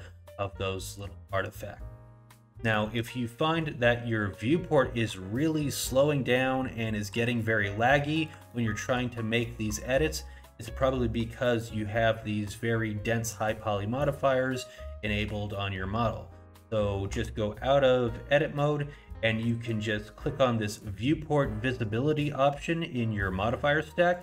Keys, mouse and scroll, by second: 2.3 middle click, 2.7 middle click, 3.2 scroll down 1, 3.5 middle click, 8.0 middle click, 8.5 shift+middle click, 16.1 scroll down 1, 16.7 scroll up 1, 17.2 Tab, 17.7-19.1 scroll down 1, 24.1 click.